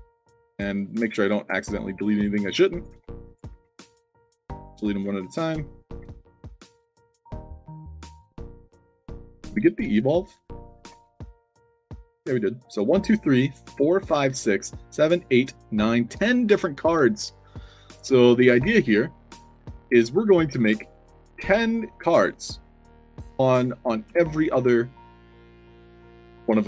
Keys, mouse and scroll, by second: 0.4 click, 0.7 click, 1.3 click, 1.7 click, 2.2 click, 2.7 click, 3.2 click, 3.8 click, 4.3 click, 4.7 click, 5.2 click, 7.3 click, 7.9 click, 8.7 click, 9.2 click, 9.5 click, 10.0 click, 16.9 alt+drag, 17.3-18.3 typing, 18.3 shift+click, 19.6-22.7 typing, 25.0-26.6 typing.